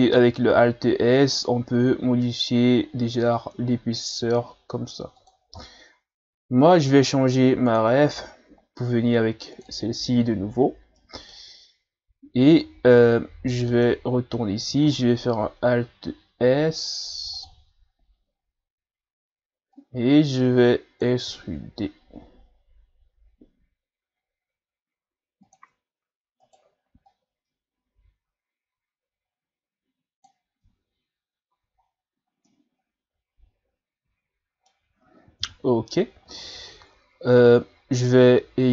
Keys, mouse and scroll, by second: 5.6-6.1 scroll down 1, 6.1 Tab, 7.7-8.1 drag, 11.0 middle click, 11.8-12.9 scroll up 1, 13.7 Tab, 14.9 alt+s, 17.9 scroll up 1, 19.7-21.2 drag, 21.2 e, 26.4 right click, 27.1-30.1 drag, 30.6 Tab, 31.5 a, 31.9-32.5 scroll down 2, 32.5-35.4 middle drag, 35.4 KP_1, 36.3-36.7 scroll up 4, 37.0-37.3 ctrl+scroll down 1, 37.3 Tab, 38.6 right click.